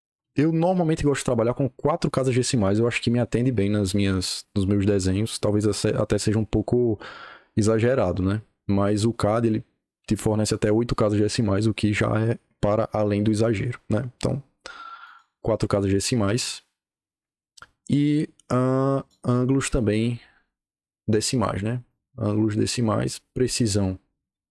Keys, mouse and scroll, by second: 14.9 click, 18.8 click, 21.8 click, 23.3 click, 24.4 click.